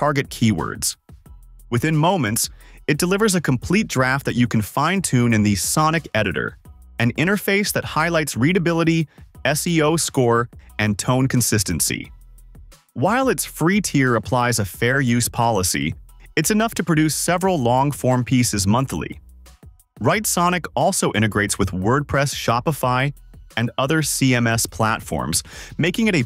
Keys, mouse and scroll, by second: 1.6 click.